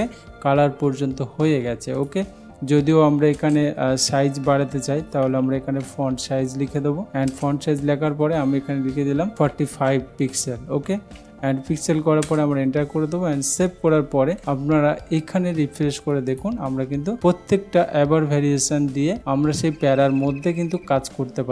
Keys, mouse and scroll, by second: 2.1 click, 3.5 Return, 4.9-6.7 typing, 7.1 Down, 7.4 Return, 9.1-11.9 typing, 12.3 Return, 14.2 ctrl+s, 16.4 click.